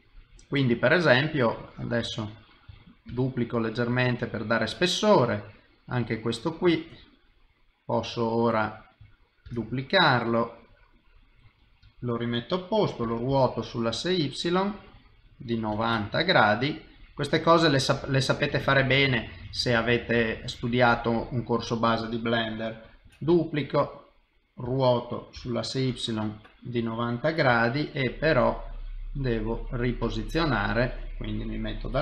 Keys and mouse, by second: 0.8 click, 1.6 middle click, 3.1 shift+d, 4.1 middle click, 5.5 click, 5.8 middle click, 7.0 middle click, 9.4 shift+d, 16.4 middle click, 18.2 click, 18.5 middle click, 19.7 shift+click, 20.1 shift+middle click, 20.9 middle click, 23.0 shift+d, 24.6 r, 27.5 g, 30.5 middle click, 31.8 KP_7.